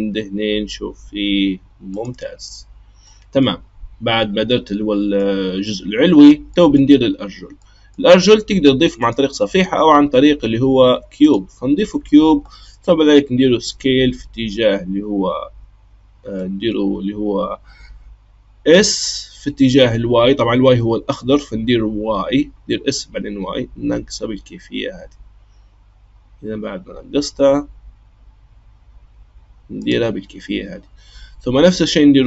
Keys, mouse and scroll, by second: 3.0-9.0 middle drag, 9.0-12.1 drag, 13.5 s, 18.8 s.